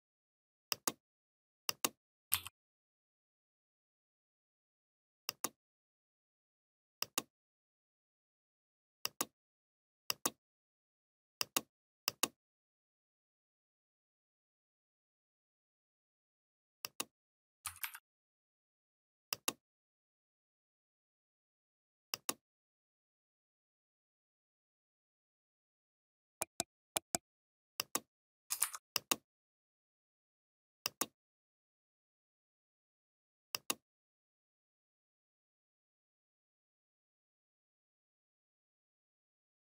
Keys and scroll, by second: 14.0 ctrl+g, 17.5 Down, 19.8 Down, 20.1 ctrl+z, 20.3 Down.